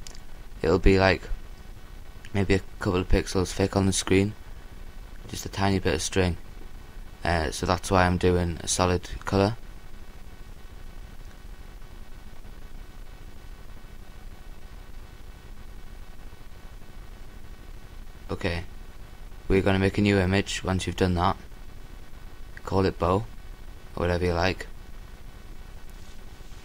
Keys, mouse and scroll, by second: 3.5 s, 5.4 click, 5.4 l, 6.3 s, 7.9-12.2 drag, 13.1 g, 17.1 a.